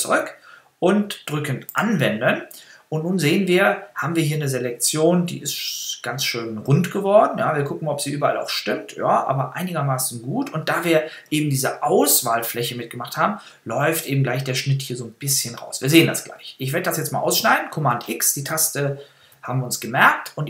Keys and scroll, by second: 19.2 super+x.